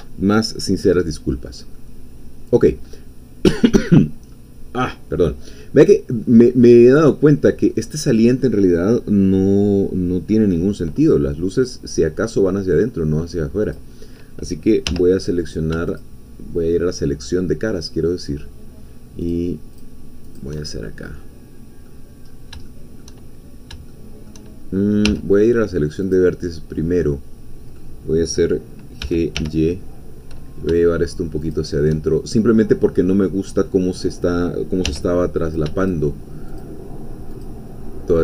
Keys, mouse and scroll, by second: 0.9-1.7 scroll up 2, 1.7-2.9 middle drag, 2.9-4.9 scroll up 1, 4.9 scroll down 1, 5.2-7.3 middle drag, 7.6 scroll up 1, 13.8-14.8 drag, 14.8 3, 15.4 click, 15.9 shift+click, 19.3 shift+click, 20.4 shift+click, 20.6-22.0 shift+middle drag, 22.3 scroll up 1, 22.7 shift+middle click, 23.3-23.7 shift+scroll up 3, 23.9 shift+middle click, 24.6 shift+scroll up 2, 25.1 1, 26.0 click, 27.0-29.0 middle drag, 29.0 g, 29.4 y, 31.4 shift+click, 32.6 scroll down 1, 32.8 middle click, 33.2-34.8 middle drag, 34.8 3, 35.4 shift+click, 35.9 shift+click, 37.4-38.2 shift+drag.